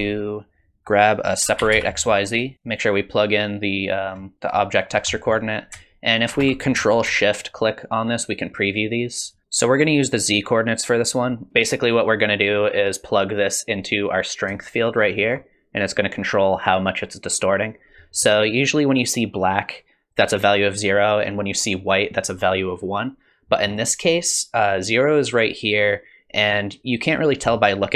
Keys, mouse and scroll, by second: 2.5 click, 2.7 click, 4.3 click, 4.8-5.7 scroll up 3, 5.1 middle click, 7.4 ctrl+shift+click, 8.3 ctrl+shift+click, 9.3 ctrl+shift+click, 9.4 click, 11.5 middle click, 11.5-13.2 scroll up 3, 14.4 click, 23.5 middle click.